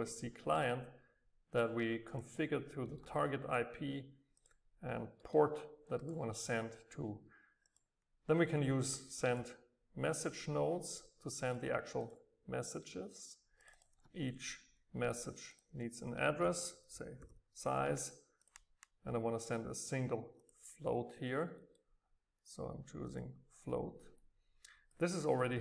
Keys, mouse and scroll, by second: 0.7 click, 2.8 click, 2.9-4.4 middle drag, 4.4 click, 5.2 middle click, 6.0-9.7 drag, 10.2-12.9 drag, 12.9 middle click, 13.6-17.5 drag, 18.5-21.7 drag, 21.7-23.0 middle drag, 23.0-24.2 drag, 24.2-25.6 right drag.